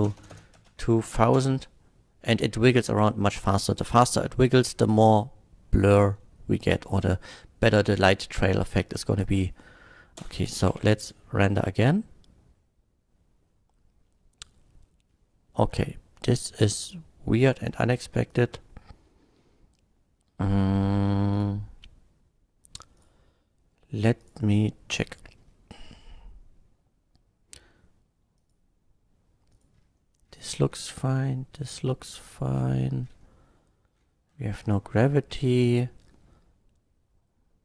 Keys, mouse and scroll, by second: 0.0-1.3 typing, 0.5 Return, 1.0 shift+Left, 10.3 space, 10.7 F12, 18.3 click, 21.3 click, 23.0 click, 24.2 click, 25.7 scroll down 1, 25.9 scroll up 1, 28.4 click, 29.5 click, 29.7-30.3 scroll down 2, 32.2 scroll down 1, 34.3 scroll up 1.